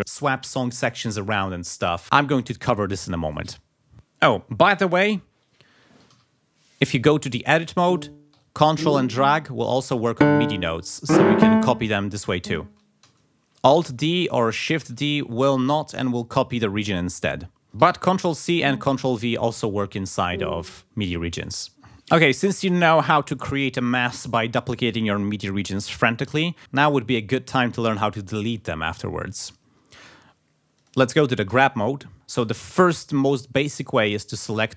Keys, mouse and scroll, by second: 3.9 ctrl+click, 5.5 ctrl+scroll up 2, 6.1 ctrl+e, 7.8 click, 8.6 ctrl+click, 10.0 click, 11.0 ctrl+click, 12.3 click, 13.1 alt+d, 14.1 ctrl+z, 14.9 shift+d, 16.0 click, 17.8 ctrl+c, 18.5 ctrl+v, 20.1 click, 30.7 click, 31.5 g, 32.1-33.3 ctrl+scroll up 6, 33.8 click, 34.5 click.